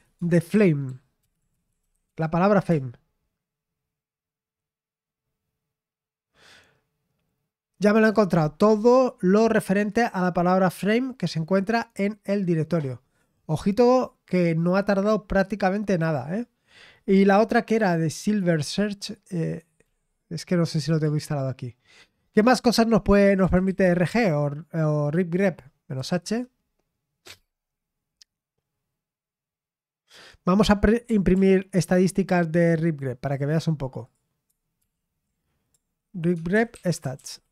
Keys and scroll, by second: 0.0-2.7 typing, 19.8 typing, 23.2-24.5 typing, 26.0 typing, 26.2 Return, 31.3 ctrl+p, 34.5 typing, 34.8 ctrl+p, 36.1-37.5 typing.